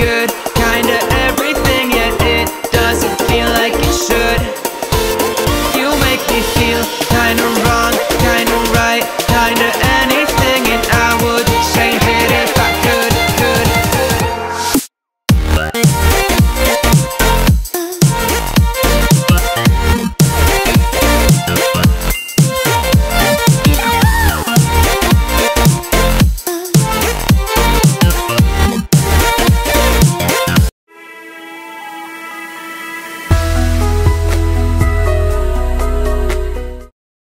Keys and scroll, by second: 11.4 ctrl+a, 11.7 ctrl+c, 12.1 ctrl+Tab, 13.2 ctrl+v, 13.7 ctrl+t.